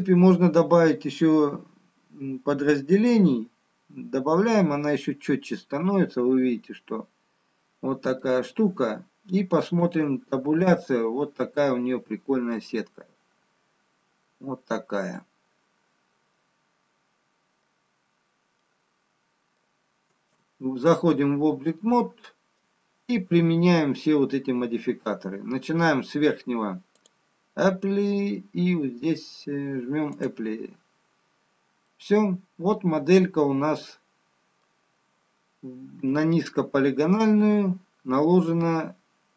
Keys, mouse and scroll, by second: 4.0 click, 5.9 middle click, 11.3 Tab, 12.9 middle click, 12.9-14.7 scroll up 2, 14.7-16.0 scroll down 1, 16.9 middle click, 18.9-20.8 scroll down 4, 20.8 middle click, 22.2 Tab, 23.5 middle click, 27.6 click, 27.6-29.4 scroll up 5, 31.4 click, 32.7 middle click, 37.1 Tab, 38.0 scroll up 2, 39.2-39.3 scroll down 1.